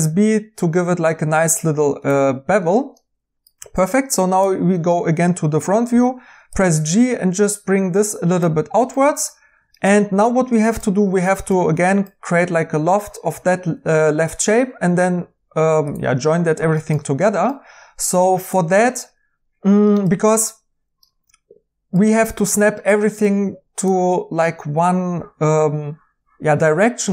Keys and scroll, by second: 5.9 g.